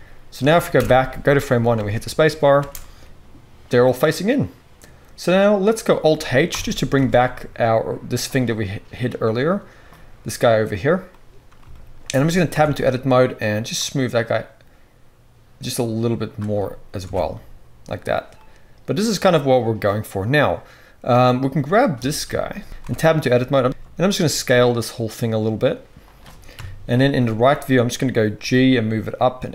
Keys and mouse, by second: 0.2 middle click, 0.7 shift+Left, 1.7 space, 2.5 space, 3.0-8.2 middle drag, 6.4 alt+h, 6.9 alt+a, 8.2-9.9 drag, 9.9-22.6 right drag, 12.5 Tab, 13.8-21.2 drag, 13.8-21.2 middle drag, 17.0 Tab, 22.6 shift+Left, 22.6 middle click, 22.6 s, 22.8 Tab, 23.5 s, 26.5-29.5 middle drag, 26.5 KP_3, 27.0 z, 28.4 g.